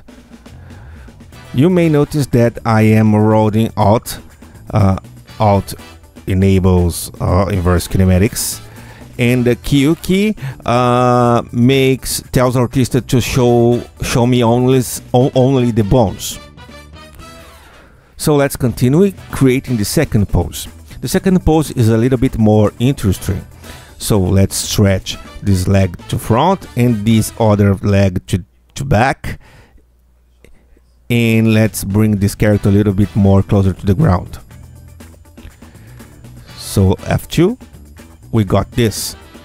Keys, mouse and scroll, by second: 6.6-12.1 alt+drag, 19.2-20.2 drag, 21.0 ctrl+F2, 22.6 q, 24.7-26.3 alt+drag, 26.9-29.3 alt+drag, 30.5-33.4 alt+drag, 34.0 r, 34.8 click, 37.7 F2, 38.4 Tab, 38.8-39.4 drag.